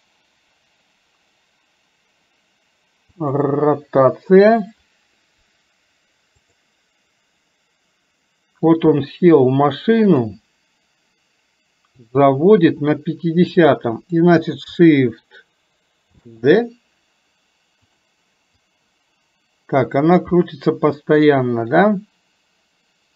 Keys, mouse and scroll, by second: 6.6 click, 10.2 click, 12.0 click, 13.7-14.2 drag, 18.7-23.1 drag.